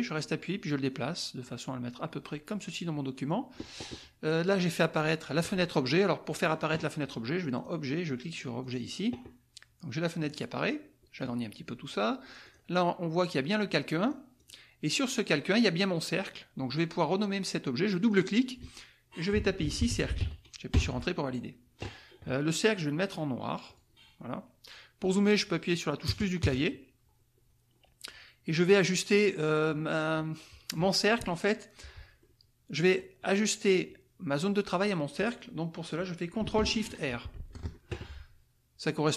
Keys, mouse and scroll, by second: 6.3 click, 7.5 click, 8.7 click, 10.2-11.4 drag, 12.5 click, 14.0 click, 14.5 click, 15.2 click, 18.0 click, 19.3-20.5 typing, 20.7 Return, 23.7 click, 26.0 KP_Add, 32.2 click, 37.3 ctrl+shift+r.